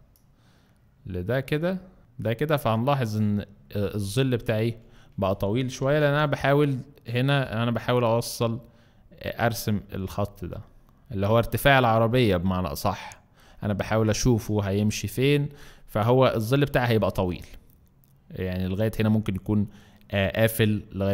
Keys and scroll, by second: 5.8 b, 13.6 z, 14.8 z.